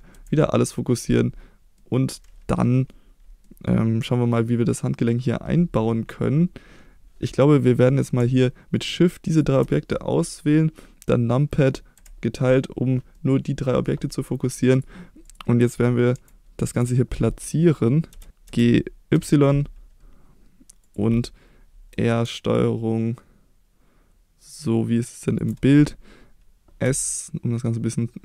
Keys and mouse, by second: 0.1 KP_Divide, 1.8 middle click, 2.6 middle drag, 3.5 middle click, 8.7 shift+click, 9.3 shift+click, 12.0 KP_Divide, 13.1-13.8 middle drag, 14.7 click, 15.2 click, 16.1 KP_1, 16.6 KP_3, 18.1 g, 18.3 x, 18.5 g, 19.1 y, 20.8 click, 21.9 r, 25.3 ctrl+click, 26.8 s.